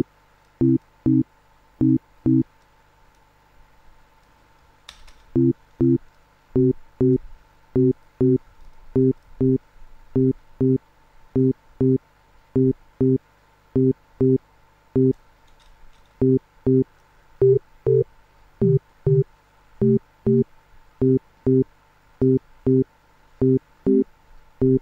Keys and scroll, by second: 4.7 space, 15.3 space.